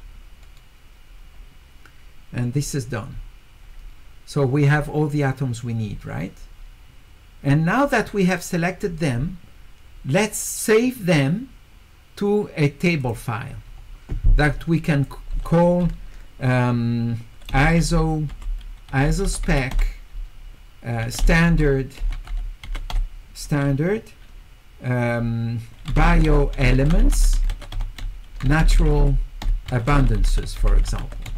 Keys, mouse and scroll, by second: 2.5-4.3 middle drag, 2.5-3.1 scroll down 2, 3.1-4.3 scroll down 1, 4.3 scroll up 2, 4.8-6.5 middle drag, 13.0 click, 14.9 click, 17.6 s, 18.9 s, 19.2 e, 20.8-23.1 typing, 26.4-31.3 typing, 30.5-31.3 scroll down 1.